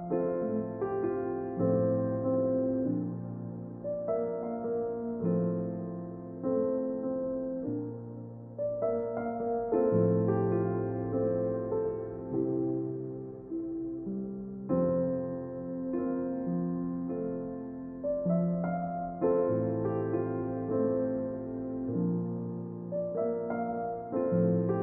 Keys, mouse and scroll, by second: 1.4 e, 5.5 Tab, 7.2-9.0 drag, 9.5-11.9 drag, 14.1-15.8 drag, 18.0-19.7 drag, 20.4 s.